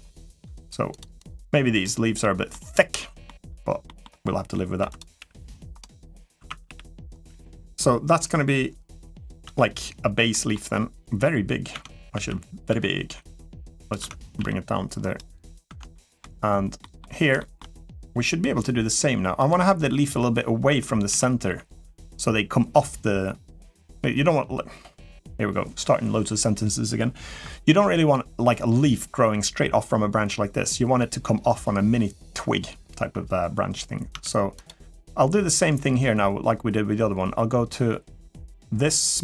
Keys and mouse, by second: 1.2 g, 2.0 middle click, 3.0 middle click, 3.6 middle click, 4.6 1, 4.7 click, 4.9 g, 6.1 1, 6.4 g, 8.0 KP_1, 9.5 Tab, 10.1 middle click, 11.5 Tab, 11.9 a, 12.5 s, 13.8 Tab, 14.1 g, 15.7 shift+middle drag, 16.6 middle drag, 17.2 shift+middle drag, 20.5 Tab, 20.9 a, 21.2 g, 33.9 Tab, 34.3 click, 38.2 click.